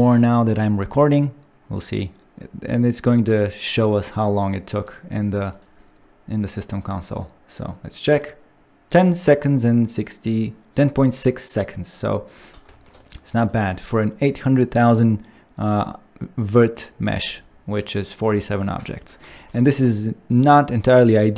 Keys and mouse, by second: 5.6-7.1 drag, 13.8 click, 18.8 ctrl+click, 19.3 shift+middle click.